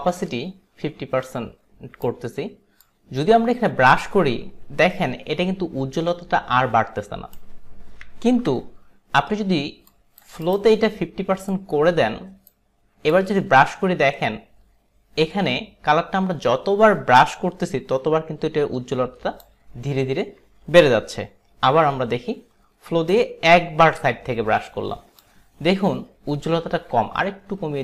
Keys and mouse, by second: 0.0 click, 2.9 click, 8.3 ctrl+z, 10.0 click, 10.5 click, 11.5 click, 13.2 click, 20.7 ctrl+z, 23.1 click, 26.6 ctrl+z.